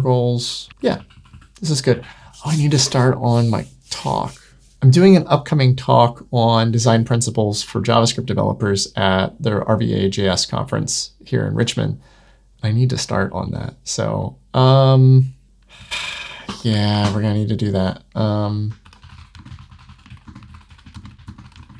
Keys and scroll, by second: 16.3 super+Return.